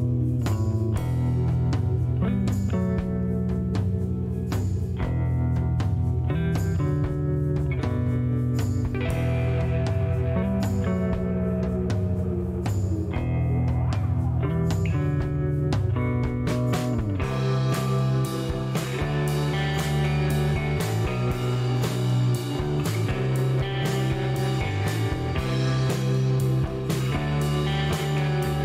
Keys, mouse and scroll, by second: 0.1 click, 0.6 right click, 1.1 scroll down 1, 1.4 middle click, 2.9 click, 4.3 click, 5.9 click, 8.1-11.4 typing, 13.7 BackSpace, 14.0 KP_0, 16.4 KP_Enter, 18.7-20.1 drag, 21.4 scroll up 1, 22.0 scroll down 2, 22.3 middle click, 23.7-24.9 drag, 25.3 middle click, 26.8 click, 28.3 click.